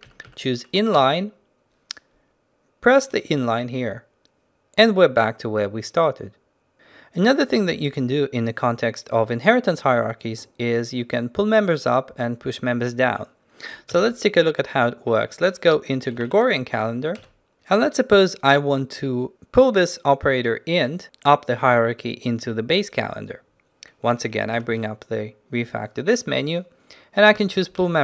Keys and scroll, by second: 6.7 ctrl+t, 14.0 ctrl+n, 24.6 ctrl+alt+shift+t.